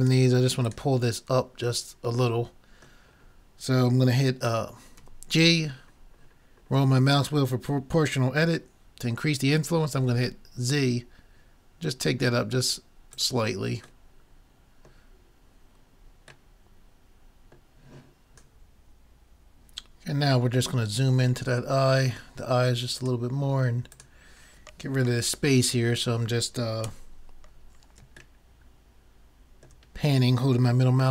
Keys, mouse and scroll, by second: 1.9 middle click, 5.0 g, 14.1-18.3 middle drag, 20.8-21.9 middle drag, 23.0-24.4 right drag, 23.3-25.6 drag, 27.0 n, 28.4 middle click.